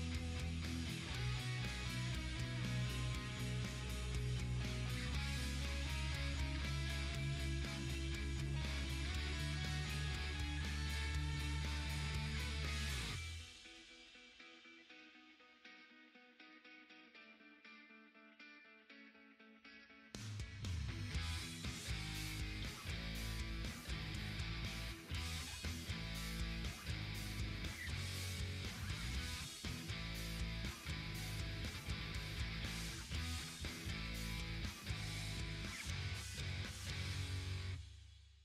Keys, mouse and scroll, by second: 0.8 click, 1.1 right click, 1.6 click, 3.8-8.1 drag, 10.8 click, 13.7-16.5 drag, 16.5 click, 25.2 ctrl+z, 32.4 ctrl+z, 33.2-37.6 drag, 38.3 Right.